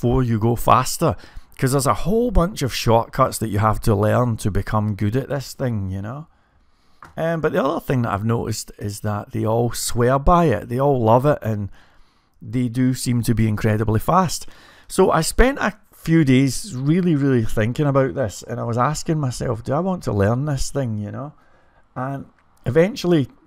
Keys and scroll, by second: 0.5-1.7 typing, 5.1-6.1 typing, 13.7 typing, 17.3-18.0 typing.